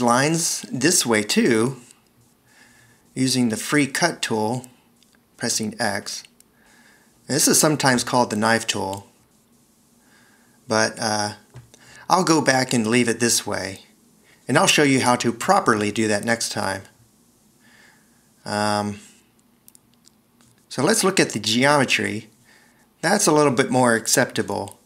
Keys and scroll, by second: 3.7 x, 9.1 Return, 10.0 x, 14.9 super+z, 19.1 c.